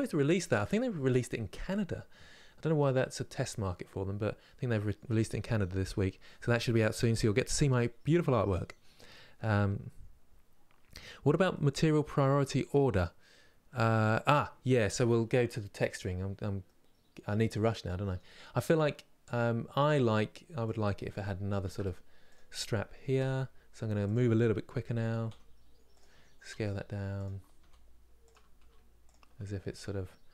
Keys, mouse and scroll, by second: 16.4-18.2 middle drag, 18.2-18.6 scroll up 2, 20.4 click, 21.4 shift+d, 22.9 r, 30.0-30.3 middle drag.